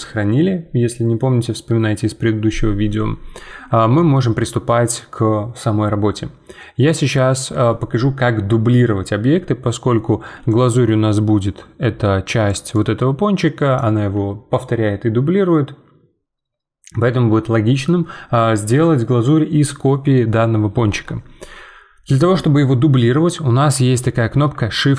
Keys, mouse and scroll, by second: 4.2-7.1 shift+middle drag, 10.5-12.5 drag, 12.5 d, 12.7-13.8 right drag, 13.8 d.